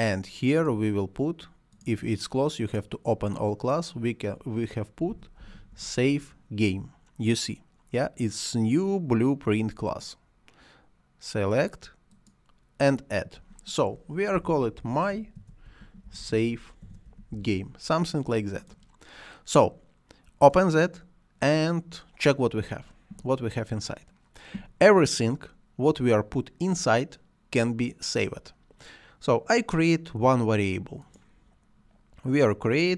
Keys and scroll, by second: 4.7-6.1 typing, 14.2-17.9 typing.